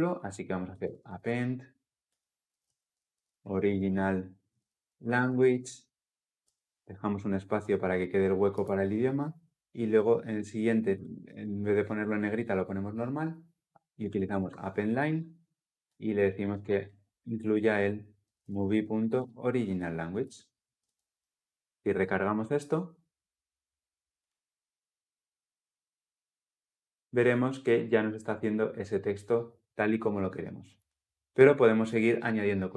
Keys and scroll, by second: 17.7 Return, 20.0 Return, 20.5 ctrl+alt+l, 20.7 ctrl+alt+o, 24.1 ctrl+F10.